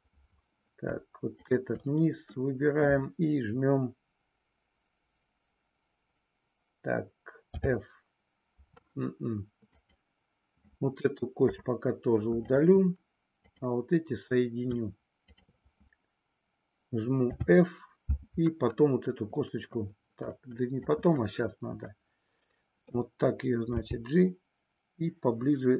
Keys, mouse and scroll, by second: 1.2 shift+click, 7.3 f, 9.7 click, 11.3 Delete, 13.5 click, 17.3 f, 20.2 click, 21.9-23.1 middle drag, 23.6 g.